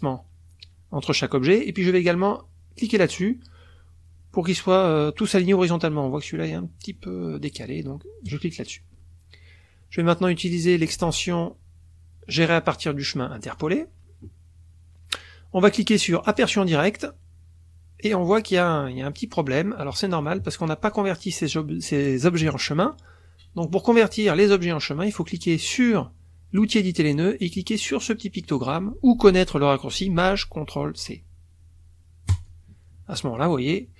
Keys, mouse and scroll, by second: 8.3 click, 10.9 click, 13.5 click, 16.2 click, 20.2 click, 20.9 click, 26.6 click, 32.3 click.